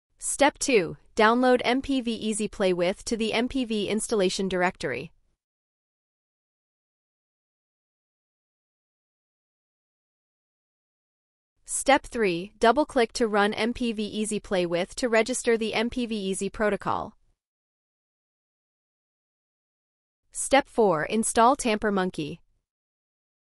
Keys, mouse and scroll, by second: 1.5 ctrl+click, 3.6 scroll down 1, 7.6 click, 16.0 ctrl+click, 17.4 click.